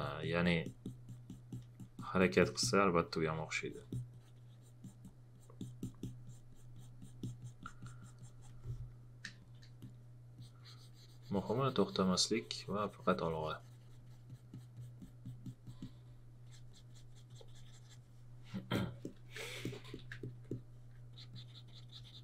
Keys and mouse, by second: 9.3 space, 9.4 click, 14.0 click.